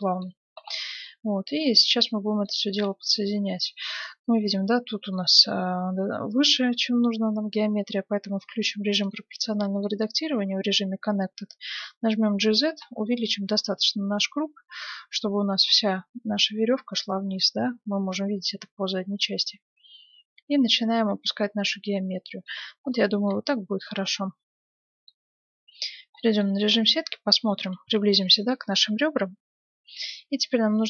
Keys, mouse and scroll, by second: 0.0-2.7 middle drag, 2.7-3.1 scroll down 1, 3.1-7.4 middle drag, 9.0-10.8 drag, 11.6 g, 22.9-24.8 middle drag, 23.3 Tab, 25.8 Tab, 28.1-30.5 middle drag.